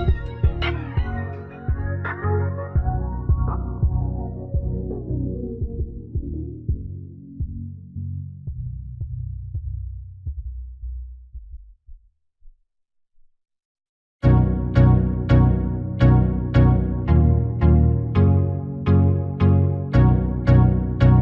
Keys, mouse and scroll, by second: 1.3-4.0 middle drag, 4.0 right click, 4.5-5.8 drag, 5.8 s, 6.1 x, 7.4 a, 8.6 s, 14.2 r, 17.8 KP_7, 19.1-21.2 middle drag, 19.1-19.9 scroll up 1.